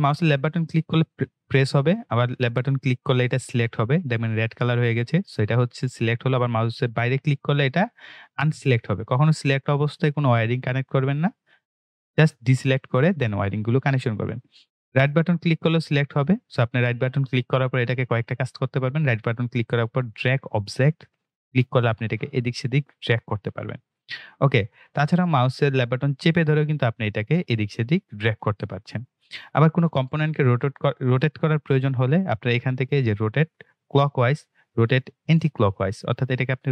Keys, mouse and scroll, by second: 0.3-1.9 scroll up 1, 1.9 click, 6.0 click, 9.2 click, 12.0 click, 16.3 click, 19.0 right click, 20.9 click, 24.2-29.8 drag.